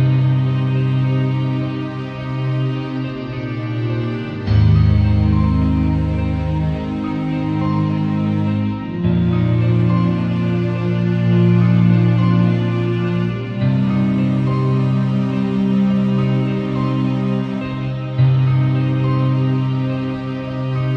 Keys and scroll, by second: 6.9 v, 12.9 super+a, 13.3 shift+super+c, 13.5 shift+super+v.